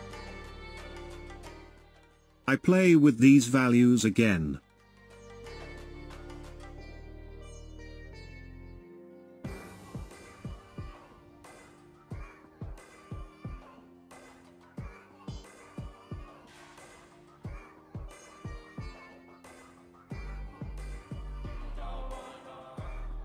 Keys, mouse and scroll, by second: 4.5 space, 9.2 space, 13.9-16.4 drag, 16.4 ctrl+z, 21.1-23.2 shift+drag.